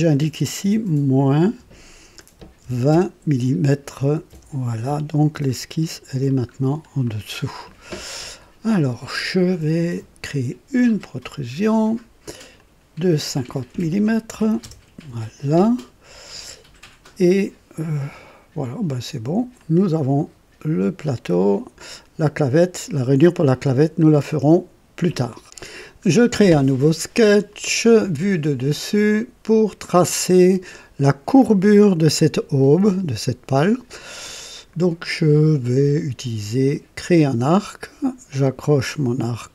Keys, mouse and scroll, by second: 1.4 KP_Subtract, 2.7 alt+KP_2, 2.9 KP_0, 4.3 KP_Enter, 4.4 KP_Enter, 5.4-6.4 drag, 6.5 scroll up 1, 7.0-7.7 right drag, 11.2 click, 12.5 click, 14.3 alt+KP_5, 14.6 KP_0, 16.3-17.3 drag, 18.9 click, 19.6-21.3 drag, 23.7-24.0 scroll down 2, 24.3-24.9 right drag, 25.4 click, 27.5 click, 28.9 click, 30.0 click, 32.1 right click, 36.9 click.